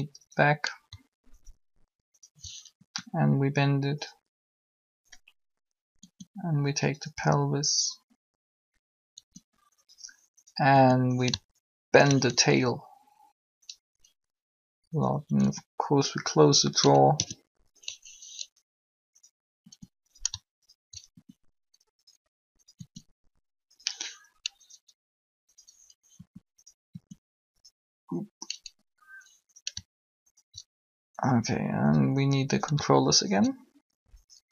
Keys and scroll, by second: 2.7 shift+r, 6.0 r, 9.1 r, 10.7 r, 12.3 ctrl+r, 15.3 r, 16.8-17.1 typing, 19.6 r, 21.1 shift+r, 22.7 r, 26.2 r.